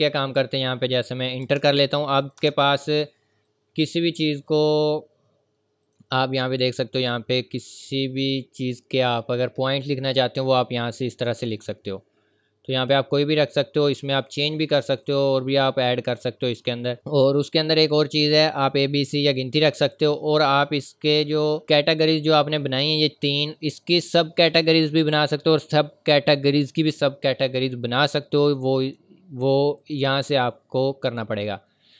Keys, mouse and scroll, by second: 1.1 click, 1.4 Return, 2.2 click, 2.4 Return, 3.4 click, 13.4 click, 21.6 click, 28.8 click.